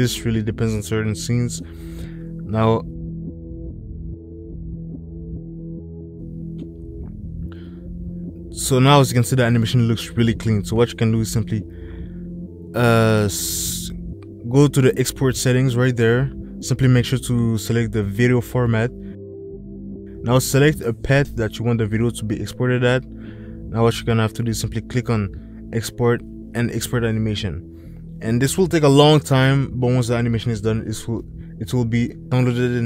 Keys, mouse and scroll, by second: 1.3 click, 3.1 click, 5.6 ctrl+s, 5.9 space, 19.4-20.5 drag, 30.6 ctrl+s, 32.2 click.